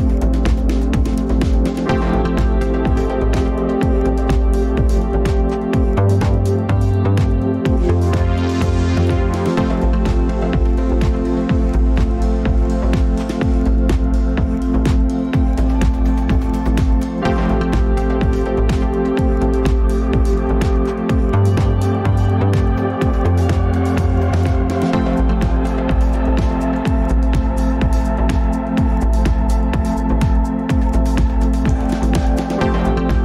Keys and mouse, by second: 4.4-4.9 shift+middle drag, 5.4 click, 14.4 drag, 18.7 Tab, 20.0 ctrl+s, 23.2 click, 25.0 alt+a, 26.1 Tab, 27.1 alt+z, 27.6 Tab, 28.6-28.9 shift+middle drag, 30.2 ctrl+s, 32.2 Tab, 33.1 ctrl+s.